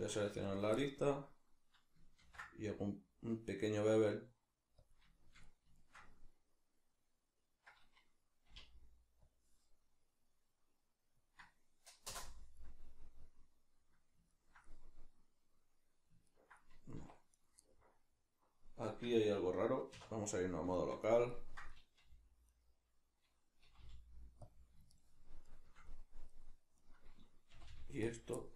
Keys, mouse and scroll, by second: 0.0 2, 0.4 shift+right click, 0.8-5.0 middle drag, 2.2 ctrl+b, 5.0 click, 5.2-17.4 shift+middle drag, 8.5 k, 17.0 1, 17.4 right click, 17.6-20.8 middle drag, 19.9 \, 22.0 g, 22.6 right click, 23.7 g, 24.5 click, 24.9-26.8 shift+middle drag, 26.8 right click, 27.5 g, 28.2 click, 28.4-28.5 ctrl+middle drag.